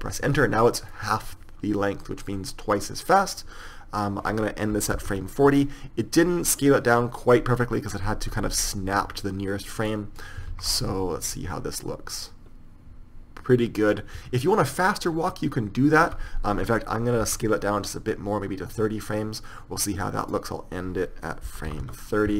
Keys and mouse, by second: 1.2-7.8 drag, 10.8 alt+a, 16.4 Escape, 17.5 s.